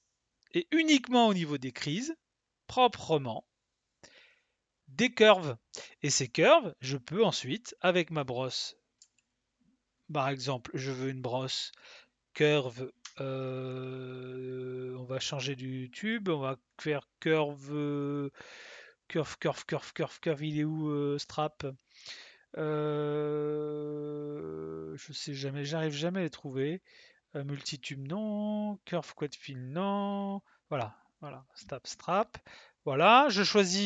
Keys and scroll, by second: 9.0 b, 13.0 c.